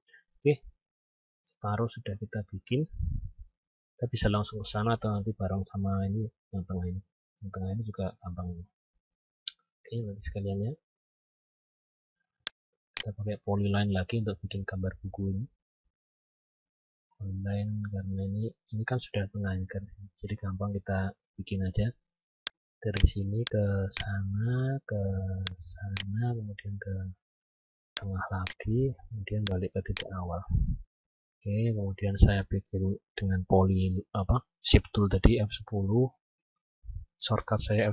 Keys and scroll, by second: 2.1 F9, 31.1 F10.